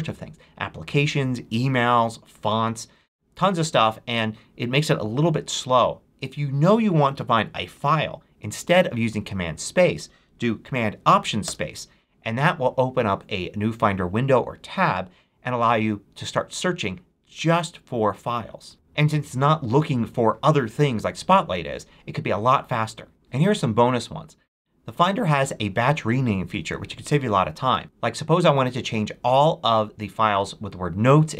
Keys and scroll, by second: 11.3 alt+super+space, 18.7 t.